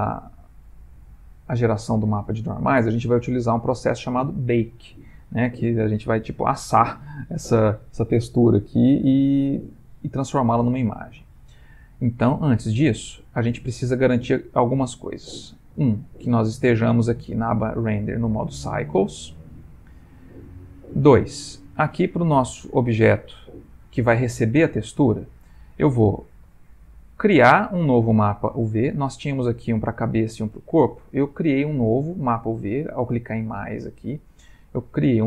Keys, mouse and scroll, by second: 12.6 click, 14.9 click, 16.0 middle click, 16.6 middle click, 22.0 click, 22.9 click, 23.5 click, 24.4 middle click, 24.4 middle click, 24.6 middle click, 24.7 middle click, 26.6 click, 29.4 click, 30.4 click, 32.5 click.